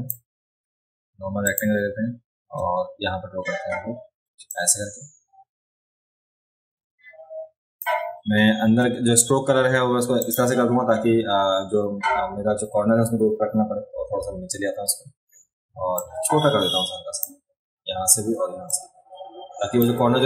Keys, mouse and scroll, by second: 1.4 click, 1.4 right click, 4.5-7.8 drag, 4.5-7.8 right drag, 10.2 click, 16.0-17.2 drag, 18.7-19.8 drag.